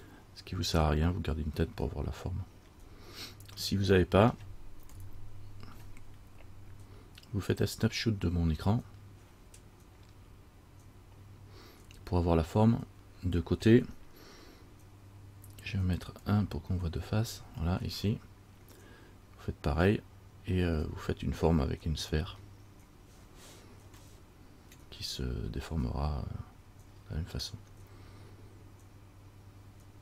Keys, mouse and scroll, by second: 1.9 middle click, 2.3 scroll down 1, 2.9-3.7 scroll up 1, 3.7 scroll up 2, 3.8 middle click, 5.1 KP_1, 16.4 KP_3, 24.3 shift+middle click, 24.3-24.8 shift+scroll up 1, 27.4 shift+scroll down 1.